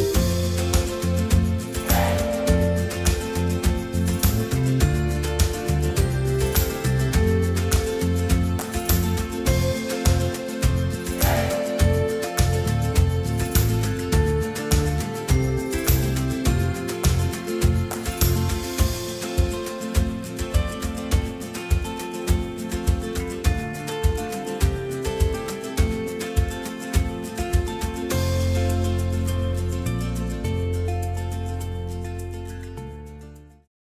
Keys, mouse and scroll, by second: 13.5-14.6 drag, 14.6-21.7 middle drag, 15.4 a, 17.7 scroll down 1, 19.3 a, 24.4 u, 25.7 middle click, 31.9 middle click, 31.9 a.